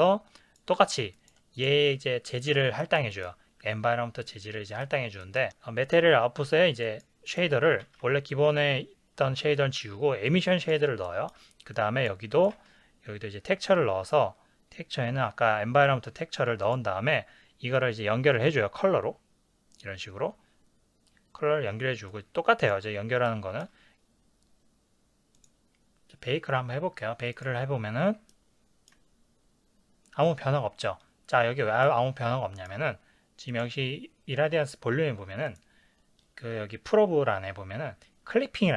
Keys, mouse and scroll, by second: 1.1 click, 2.8-6.8 ctrl+middle drag, 6.8 click, 7.3-10.3 drag, 11.7 click, 22.1 click, 23.9 click, 25.5-28.3 drag, 28.3-33.6 ctrl+middle drag, 33.6 click.